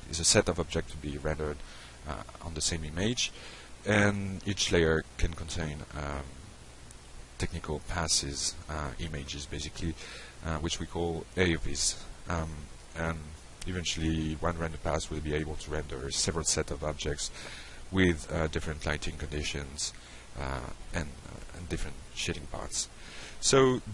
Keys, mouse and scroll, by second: 6.5 click, 12.5 click, 13.0 click.